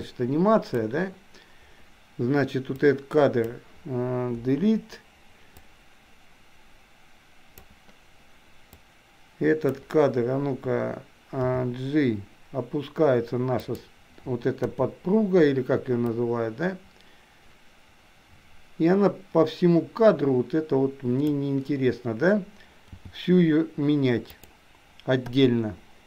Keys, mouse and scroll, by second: 2.8-3.5 drag, 4.6 Delete, 5.7-7.8 drag, 8.8-10.0 drag, 11.6 g, 14.6 i, 16.2-21.6 drag, 23.0 g, 25.5 i.